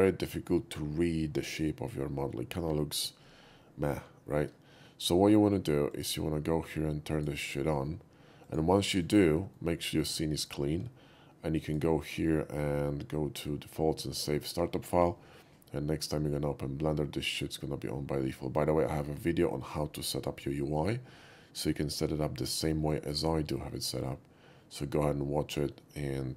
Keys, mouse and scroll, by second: 5.9 click, 7.2 click, 8.5 click, 8.9 x, 9.0 click, 9.6-10.0 middle drag, 10.3 shift+middle click, 11.7 shift+click, 17.3 click.